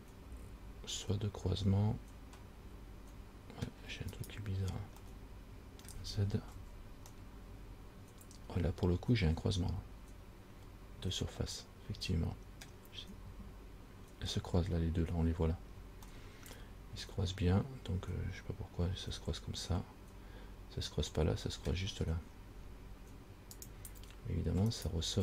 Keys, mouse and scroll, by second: 4.4 right click, 5.3 middle click, 6.7 z, 7.4 middle click, 16.4 middle click, 21.5 middle click, 23.8 click, 25.0 right click.